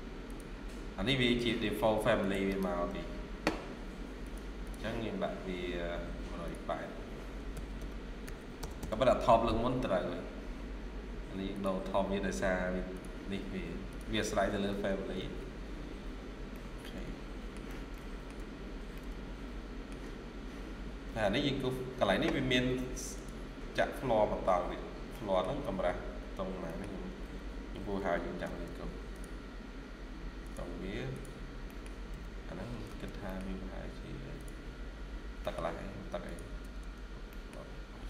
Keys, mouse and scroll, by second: 2.3 right click, 4.5 double click, 7.4-8.1 typing, 8.5 Return, 8.7 Return, 15.1 Escape, 15.2 Escape, 15.5 scroll down 1, 16.4 middle click, 17.8 middle click, 18.4 middle click, 18.4-18.8 scroll down 1, 19.8 shift+scroll down 1, 20.6 scroll up 1, 21.9 scroll down 1, 24.9 scroll up 1, 25.0 middle click, 25.4 scroll down 1, 25.9-26.3 scroll up 1, 26.5 middle click, 27.1-27.9 typing, 31.3 scroll down 1, 31.5 middle click, 32.0-32.6 typing, 32.9 scroll down 1, 33.2 middle click, 34.6-35.3 scroll up 1, 35.3 middle click, 36.5 space, 36.9 scroll down 1, 37.2 middle click.